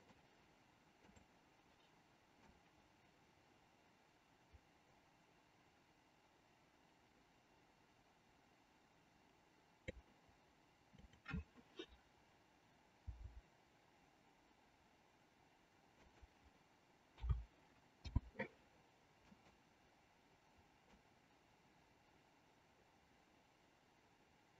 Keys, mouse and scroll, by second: 1.0 click, 2.5-9.9 drag, 10.9-12.3 drag, 13.0 r, 17.2 a, 18.0 i, 19.3 click, 20.9-24.5 drag.